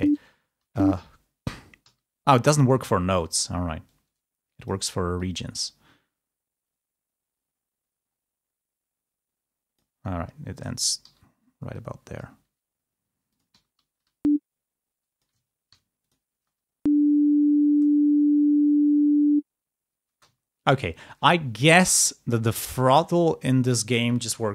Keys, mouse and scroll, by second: 1.8 k, 3.0 ctrl+scroll up 2, 4.3-10.5 drag, 12.0 click, 12.3 e, 13.5 g, 13.8 e, 15.0 click, 16.5 ctrl+space, 20.0 space, 20.3-21.8 ctrl+scroll up 2.